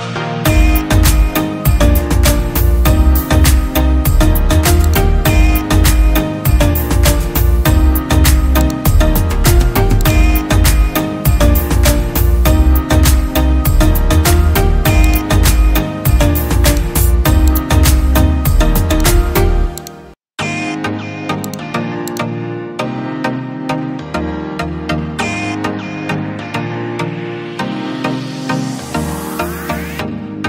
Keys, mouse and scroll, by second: 0.0-0.1 typing, 1.2-3.0 typing, 7.1 right click, 13.6-16.8 scroll down 1, 23.3 right click, 25.2-25.7 scroll down 1, 28.2 right click, 29.0-29.5 scroll down 1, 29.7 double click.